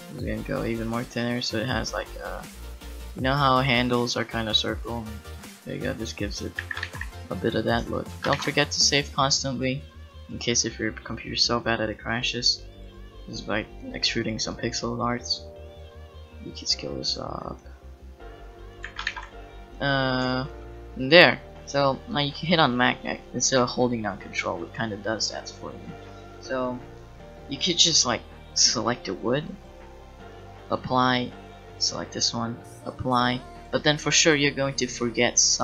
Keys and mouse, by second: 0.3 middle click, 1.3-4.7 drag, 4.7 middle click, 6.6 a, 6.8 ctrl+s, 8.3 ctrl+s, 15.8-18.8 middle drag, 18.8 a, 19.1 ctrl+s, 22.7-24.9 drag, 23.5 g, 29.5-30.7 drag, 30.7-35.6 middle drag.